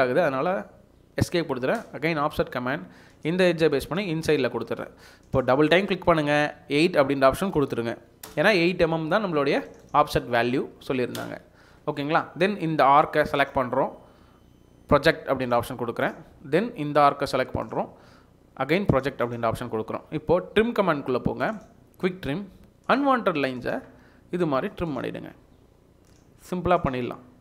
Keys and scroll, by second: 4.4 Escape, 6.7 5, 7.3 BackSpace, 7.5 BackSpace, 8.2 8, 8.2 Return, 10.7 8, 11.2 Return, 11.7 Escape.